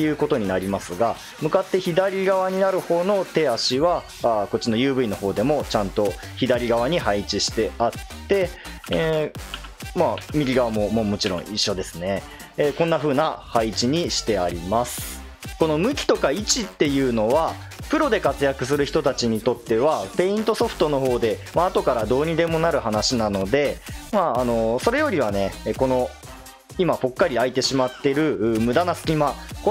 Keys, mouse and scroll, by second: 1.3 KP_1, 8.5 click, 8.9 l, 9.5 l, 10.2 l, 11.2 l, 15.4 click.